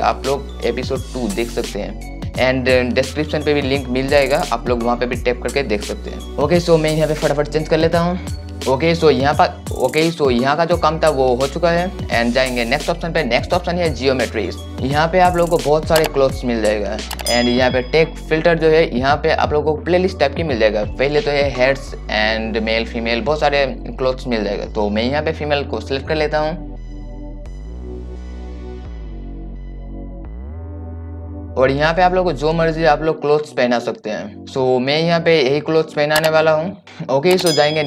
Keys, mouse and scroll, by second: 14.8 click, 19.6 click, 32.5-34.4 drag.